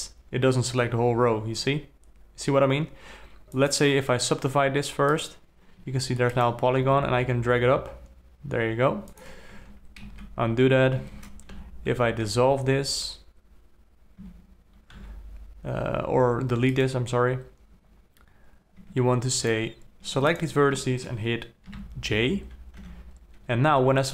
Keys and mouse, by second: 3.9-5.6 drag, 6.2 1, 6.8-7.2 drag, 7.2 g, 10.0 ctrl+z, 10.5 ctrl+z, 11.4 ctrl+z, 11.9 2, 12.7 2, 14.6 2, 15.4 x, 19.2 1, 22.1 j, 23.2 2, 23.9 3.